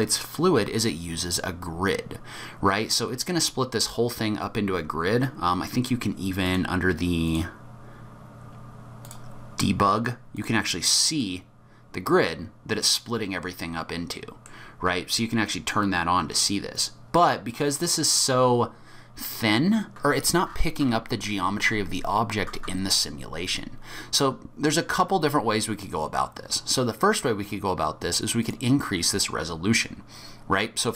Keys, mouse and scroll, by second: 4.5-6.4 scroll down 8, 6.4 click, 6.4-7.2 scroll down 1, 7.2 click, 7.9-8.4 scroll down 3, 9.0 click, 9.3-10.2 scroll down 4, 10.3 click, 12.0 middle click, 16.7 click, 17.5 middle click, 18.3-19.8 scroll up 3, 23.3-25.6 scroll up 8, 26.1-26.7 scroll up 1, 26.7-28.5 scroll down 2, 28.5 click, 28.5-29.2 scroll down 1.